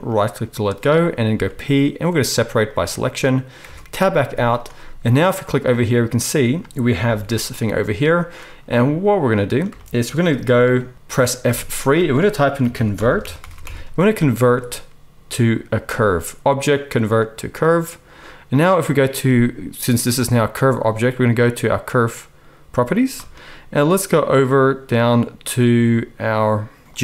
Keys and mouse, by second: 0.1-6.6 middle drag, 1.3 p, 3.6 Tab, 4.2 z, 7.0 g, 11.5 F3, 22.8 click, 22.9-26.9 middle drag, 26.9-27.0 drag.